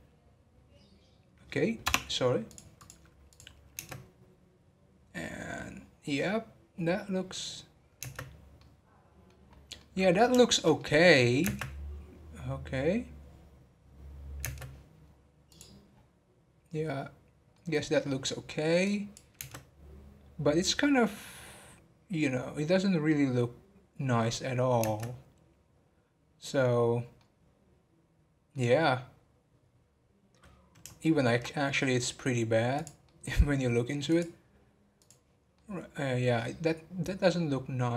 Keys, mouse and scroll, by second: 8.6-9.4 middle drag, 9.4 scroll up 4, 9.7-15.2 middle drag, 15.2-15.5 scroll down 3, 15.5-15.9 drag, 15.9-16.7 scroll down 1, 17.5 scroll down 5, 17.5-18.0 middle drag, 18.0 scroll up 2, 18.9-20.5 drag, 26.1-27.1 scroll down 1, 27.1-35.0 middle drag, 35.0-35.6 drag, 35.6-37.9 middle drag.